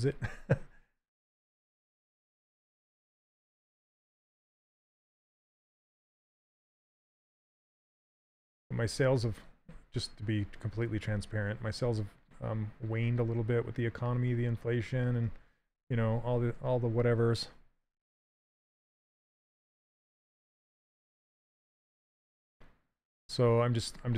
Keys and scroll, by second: 2.2 s, 7.5 s, 11.4 s.